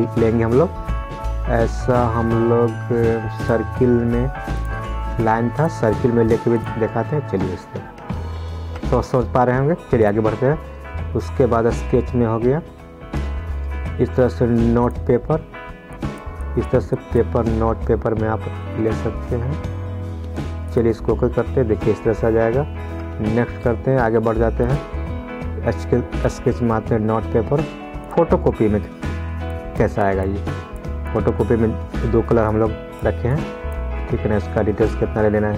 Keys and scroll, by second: 9.0 ctrl+z, 23.3 ctrl+z.